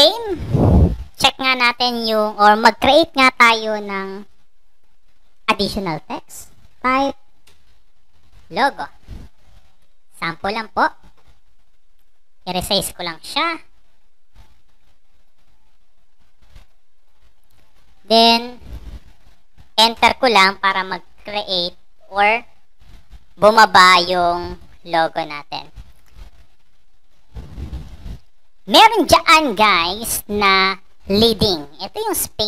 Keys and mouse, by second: 1.4 click, 2.1 click, 2.9 click, 7.4-8.8 typing, 11.8 click, 13.0-14.3 shift+drag, 14.8 click, 15.9-16.6 shift+drag, 16.9 click, 17.4 click, 18.0 click, 18.5 click, 19.9 Return, 21.4 click, 22.2 click, 23.6 click, 24.9 click.